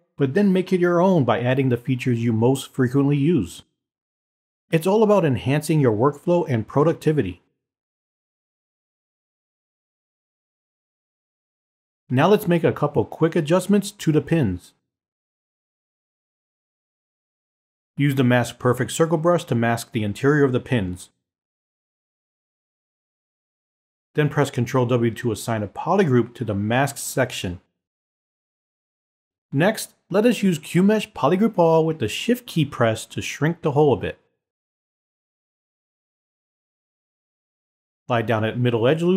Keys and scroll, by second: 27.0 w.